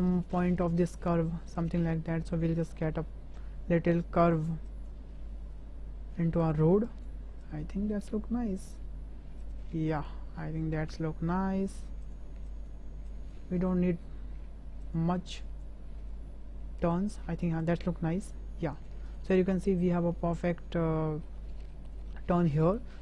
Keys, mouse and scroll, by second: 0.0 click, 0.5 g, 2.6 click, 3.0 g, 4.8 click, 5.0 g, 6.9 click, 7.4 click, 7.8 g, 10.0 click, 10.9 g, 12.5 click, 13.1 click, 13.6 g, 15.4 click, 16.0 g, 17.5 click, 17.7 g, 19.0 click, 19.3 Tab, 19.8-21.2 middle drag, 21.7 shift+drag, 22.0-22.7 middle drag.